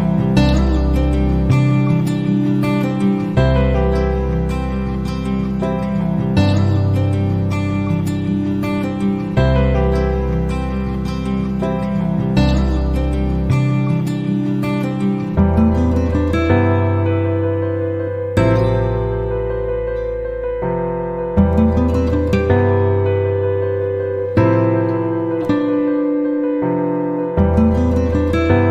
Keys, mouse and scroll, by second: 1.5 click, 2.8 click, 6.3 click, 7.1 click, 8.7 click, 10.8 right click, 12.5 click, 14.0 click, 16.1 click, 17.0 middle click, 19.3 click, 20.7 KP_3, 21.0 KP_0, 21.3 KP_Enter, 23.6 click, 24.8 KP_4, 25.4 KP_Enter, 28.2 click.